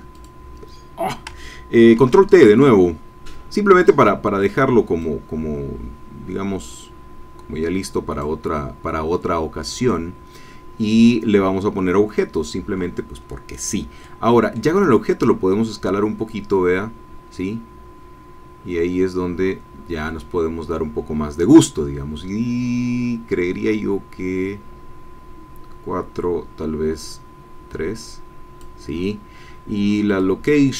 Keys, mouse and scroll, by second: 0.1 click, 1.9 ctrl+t, 6.9-10.2 drag, 14.0 middle click, 15.2-28.8 drag, 30.2-30.7 drag.